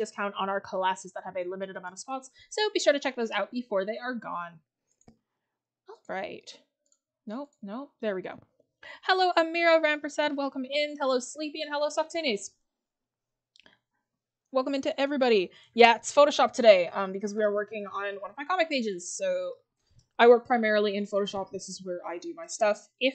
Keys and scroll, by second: 18.3 scroll up 1.